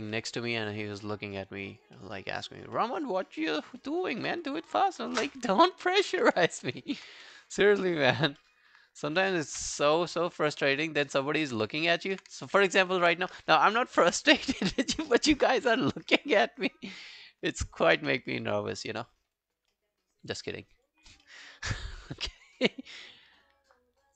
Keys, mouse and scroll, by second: 0.2 alt+middle click, 0.5 alt+scroll down 1, 0.7 alt+click, 1.1 alt+middle click, 1.4 alt+scroll up 4, 1.7 alt+click, 2.0 alt+middle click, 2.2 alt+right click, 2.4 alt+click, 2.8 alt+middle click, 3.1-3.4 alt+scroll down 1, 3.4 alt+middle click, 3.7 alt+right click, 3.9 alt+click, 4.3 alt+middle click, 4.6 alt+scroll down 1, 6.0 ctrl+i, 6.7 alt+middle click, 7.2 w, 7.4 right click, 8.2 scroll down 2, 8.4 middle click, 11.3 alt+scroll down 1, 11.5 alt+click, 11.9 alt+middle click, 12.1 alt+right click, 12.5 ctrl+z, 12.9 ctrl+z, 17.6 alt+middle click, 18.0 q, 18.5 q, 18.6 alt+scroll down 4, 18.9 alt+middle click, 19.1 alt+right click, 19.4 alt+click, 19.7 alt+middle click, 20.1 alt+scroll up 1, 20.4 alt+middle click, 20.6 alt+right click, 20.9 alt+click, 21.3 alt+middle click, 21.8 alt+click, 22.2 alt+middle click, 22.4 alt+right click, 22.6 alt+click.